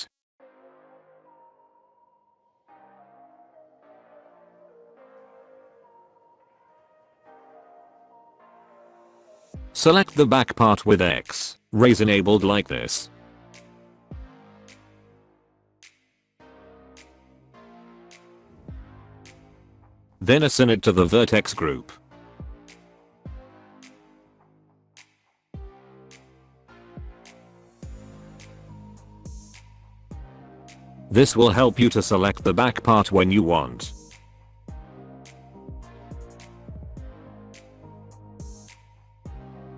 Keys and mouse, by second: 3.9 alt+middle click, 4.4 alt+middle click, 5.9 shift+middle click, 6.4 middle click, 7.3 alt+middle click, 7.6 alt+middle click, 8.8-11.1 drag, 12.7 click, 13.8-15.6 drag, 16.4 middle click, 17.0 middle click, 17.7 middle click, 18.0 shift+middle click, 18.2 middle click, 18.6 alt+middle click, 18.8 alt+middle click, 18.9 middle click, 19.1 shift+middle click, 19.3 middle click, 21.3 click, 24.7 shift+middle click, 25.7 Tab, 26.5 alt+a, 27.0-28.1 middle drag, 28.8 click, 30.2 Tab, 30.9 a, 33.1 click, 34.0 middle click, 35.5 Tab, 36.1 alt+a, 36.5-37.3 middle drag.